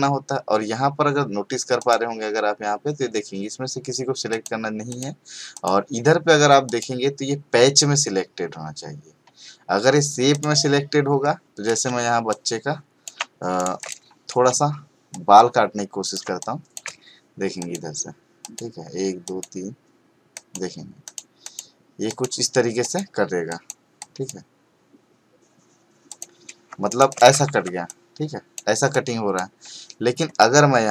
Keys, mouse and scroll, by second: 1.8 click, 4.3 click, 10.3 click, 11.8 space, 12.3-13.2 ctrl+click, 13.6 right click, 13.8 click, 14.4 space, 15.1-16.3 ctrl+click, 26.1 click, 26.7 space, 26.8 right click, 27.1 click, 27.4 v, 27.8-28.8 click.